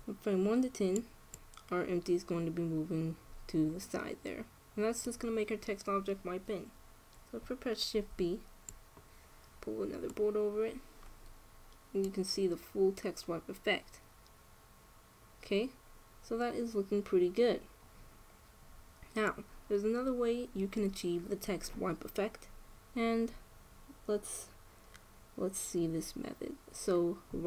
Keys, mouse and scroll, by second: 0.8-3.8 drag, 8.6 shift+b, 12.8-14.5 drag.